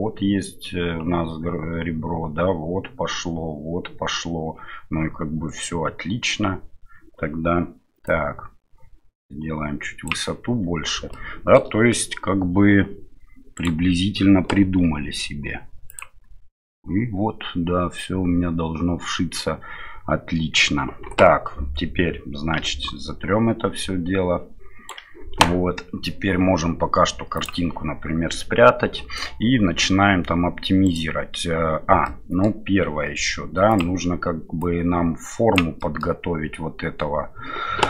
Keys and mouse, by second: 8.0-10.1 drag, 11.1-11.5 shift+middle drag, 13.5-14.8 right drag, 14.8 s, 22.6 d, 24.9 right click, 24.9 d, 25.0 d, 27.3 click, 32.0-32.4 middle drag, 34.6 click, 35.8-36.1 middle drag.